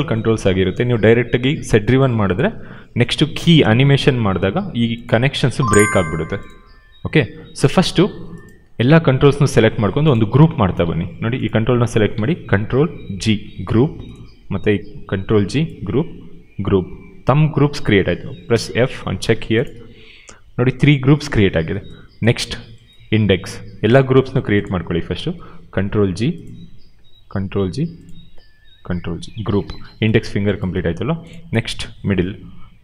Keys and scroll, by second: 10.8 q, 13.3 ctrl+g, 15.0 ctrl+g, 16.4 ctrl+g, 25.8 ctrl+g, 27.1 ctrl+g, 28.7 ctrl+g, 32.7 ctrl+g.